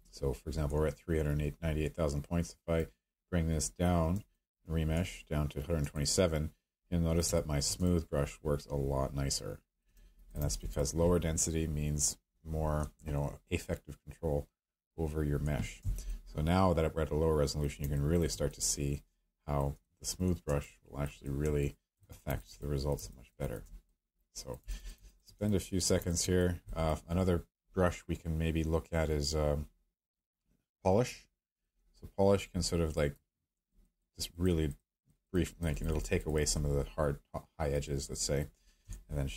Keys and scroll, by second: 7.3 space.